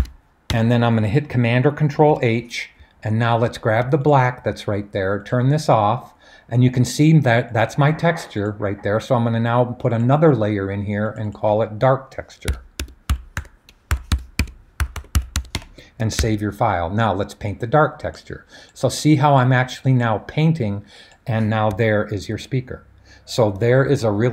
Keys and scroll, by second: 0.5 Return, 1.9 super+h, 12.2-15.8 typing, 16.2 super+s.